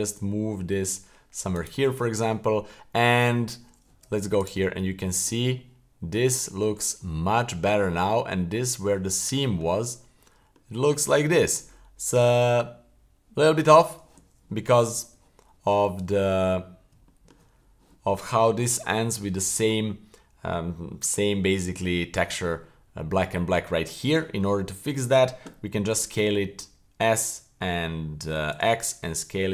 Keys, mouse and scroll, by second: 2.4 scroll up 1, 3.3-3.9 scroll down 2, 3.9 Tab, 4.4 right click, 4.7-5.3 middle drag, 5.6-6.1 middle drag, 6.4-6.8 middle drag, 7.0-7.7 middle drag, 7.9-8.3 middle drag, 8.6 middle click, 9.1-9.6 middle drag, 9.8-10.8 scroll up 2, 10.8 middle click, 15.1 Tab, 16.6-16.9 scroll up 3, 17.0 shift+middle click, 24.4 scroll down 1, 24.6 shift+middle click, 25.9 s.